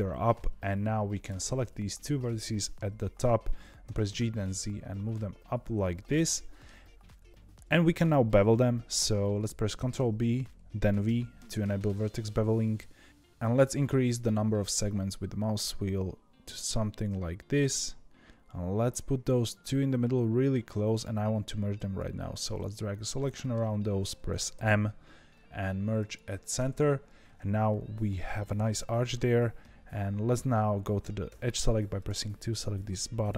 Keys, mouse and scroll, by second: 0.6 click, 2.1-3.8 middle drag, 3.8 g, 6.3 middle click, 6.8 scroll up 2, 7.2-9.7 shift+middle drag, 9.7 ctrl+b, 21.7 click, 22.5-23.0 scroll up 6, 23.0 scroll down 1, 23.3-24.5 shift+middle drag, 24.5 m, 26.9 scroll down 2, 31.2 2, 31.9 click, 33.2 x.